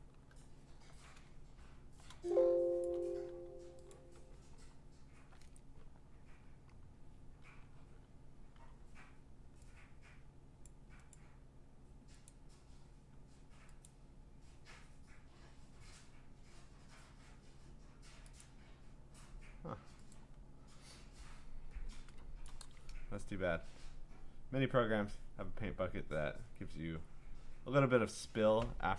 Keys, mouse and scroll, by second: 0.1-0.8 ctrl+scroll, 0.7 click, 1.1 ctrl+z, 2.8 click, 3.1 w, 3.9 click, 4.7 scroll, 8.5 g, 10.6 click, 11.1 click, 12.3 click, 13.9 click, 18.4 click, 20.1 click, 22.4 click, 22.5 click, 27.7 click.